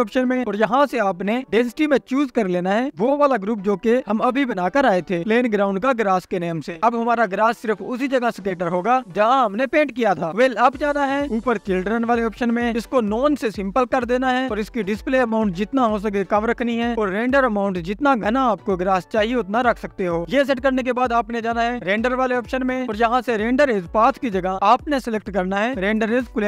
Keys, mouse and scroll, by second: 4.1-5.1 drag, 8.5-13.2 drag, 18.5-26.4 drag.